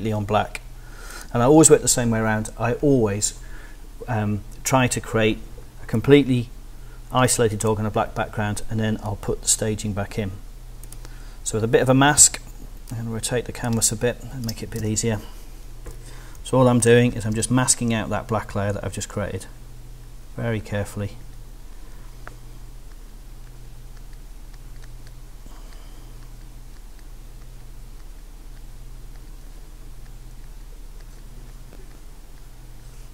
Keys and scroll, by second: 12.2 r, 13.7 space, 14.8 b, 17.3 x.